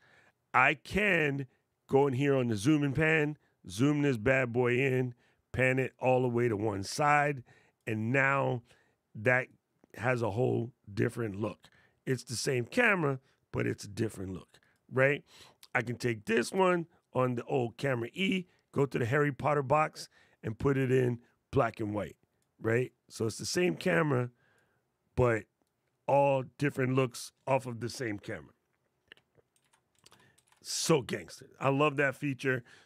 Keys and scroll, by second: 29.3 super+z, 29.8 super+z, 30.1 super+z.